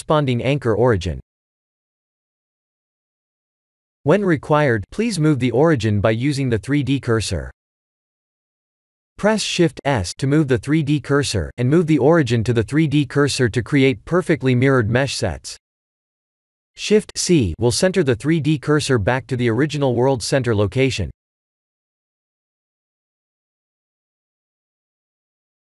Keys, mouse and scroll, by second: 2.0 middle click, 2.8 middle click, 5.2-6.5 scroll down 15, 7.2 click, 11.2 click, 13.9 click, 15.8 middle click, 16.5 middle click, 16.8 middle click, 18.3 middle click, 21.5 middle click, 22.4 shift+middle click, 22.5 shift+middle click, 22.6 shift+middle click, 23.1 middle click, 23.6 middle click.